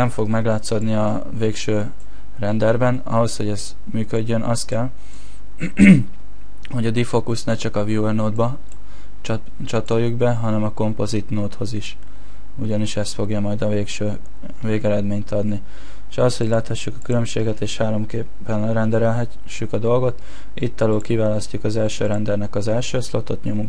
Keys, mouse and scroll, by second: 17.2 click.